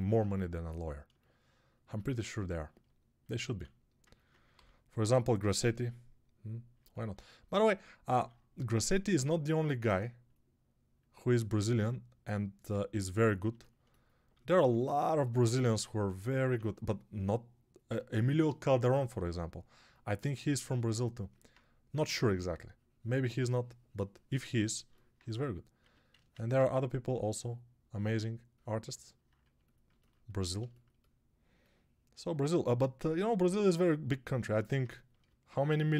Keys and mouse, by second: 3.4 alt+q, 4.4 g, 8.0 alt+q, 14.3 alt+q, 15.6 g, 16.0 ], 16.2 ], 16.3 ], 21.9 3, 25.6 1, 32.8 g.